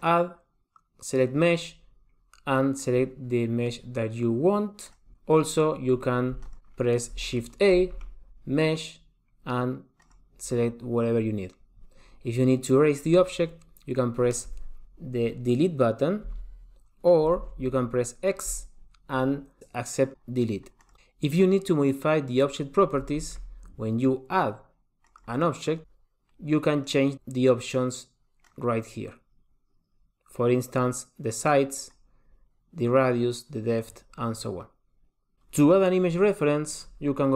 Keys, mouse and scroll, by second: 0.1 click, 6.5 x, 7.9 shift+a, 16.4 Delete, 17.6 super+z, 18.6 x, 23.3 shift+a, 27.0 click, 28.7 click.